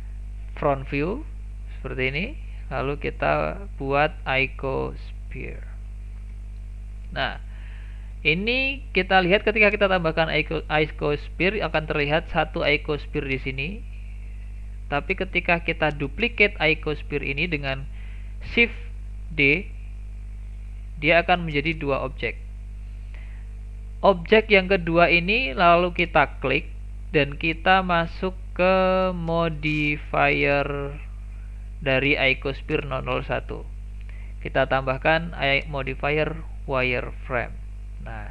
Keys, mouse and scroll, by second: 0.8 KP_1, 2.1 KP_1, 2.8 shift+a, 6.2 scroll up 1, 6.5-6.9 shift+middle drag, 6.9 scroll down 1, 7.2-7.6 shift+middle drag, 7.6-8.3 scroll down 1, 8.3-11.3 shift+middle drag, 14.6 click, 15.1 click, 19.1 shift+d, 24.2 click, 25.4 click, 26.2 click, 29.1-30.6 drag, 34.3-37.3 drag, 37.8-38.3 scroll up 5.